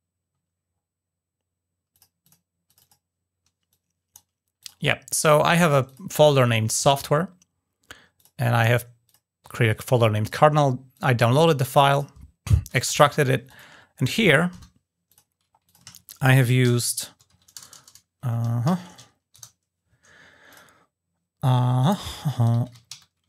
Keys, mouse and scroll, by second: 0.4-1.7 scroll down 2, 1.7 click, 2.0 click, 2.4 click, 3.4 click, 4.3 drag, 4.7 scroll up 2, 5.6 drag, 7.9 click, 8.8 click, 10.0 click, 10.7-11.2 drag, 11.7 click, 13.2 click, 13.8 click, 14.8 click, 15.4 click, 20.2 click, 21.6 click.